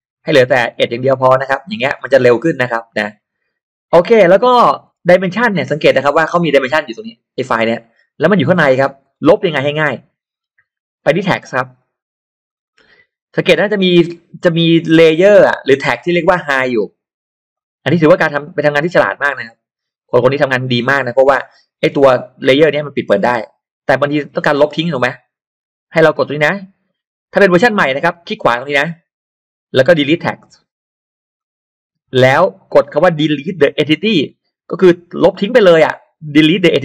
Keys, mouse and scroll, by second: 1.4 click, 2.3-2.6 scroll up 2, 2.3 middle click, 3.1 scroll down 1, 3.9-4.2 scroll down 1, 4.2 middle click, 4.6-5.2 scroll up 1, 5.2 middle click, 5.7-7.5 drag, 8.7-9.3 scroll down 1, 9.3 middle click, 10.9 click, 11.7 click, 16.8 click, 17.5 click, 18.1 middle click, 18.1-19.7 scroll up 3, 18.4 click, 21.9 click, 28.5 right click, 31.3 click, 34.0 click.